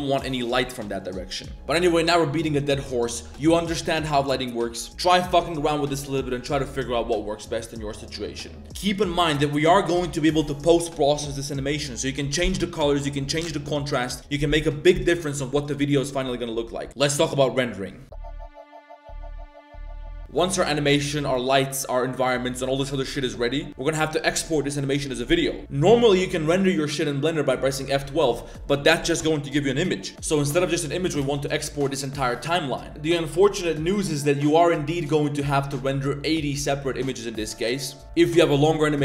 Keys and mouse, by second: 30.1 click, 30.1 space, 31.2 space, 32.9-35.2 drag, 38.3 middle click.